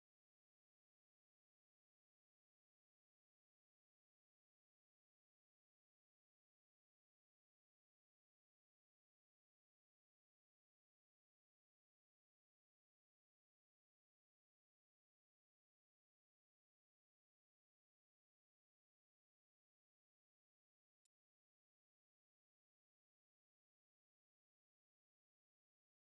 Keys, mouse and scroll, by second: 0.3 click, 0.5 0, 1.4 scroll down 3, 1.5 middle click, 1.6 shift+d, 1.9 click, 2.1 0, 2.7 click, 2.8 shift+a, 4.1-5.6 drag, 5.9-6.3 middle drag, 6.3 ctrl+shift+click, 6.9 shift+a, 7.4 BackSpace, 8.1 click, 9.5 middle click, 10.1-12.3 ctrl+shift+drag, 12.3 0, 13.0-14.3 drag, 14.7 click, 14.9 Tab, 14.9 click, 15.2 Tab, 15.3 middle click, 15.5 click, 15.5 shift+a, 16.4 click, 17.1 middle click, 17.2 scroll down 4, 17.3 scroll up 3, 18.0 middle click, 18.3 click, 18.5-20.2 drag, 20.3 middle click, 20.6 KP_0, 21.4 ctrl+alt+b, 22.9 z, 24.9-25.9 drag, 26.0 scroll up 7.